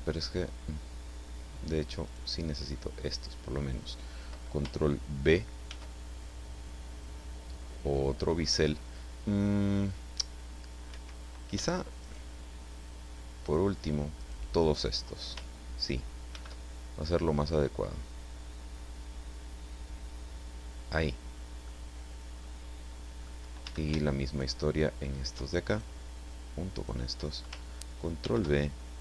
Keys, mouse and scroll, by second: 2.0 shift+right click, 5.6 ctrl+b, 10.9 Escape, 12.0 shift+right click, 13.4 shift+right click, 14.2 shift+right click, 16.3 ctrl+b, 20.8 click, 21.6-23.4 middle drag, 23.6 a, 24.3 alt+shift+right click, 25.7 alt+shift+right click, 26.7 shift+right click, 28.2 ctrl+b.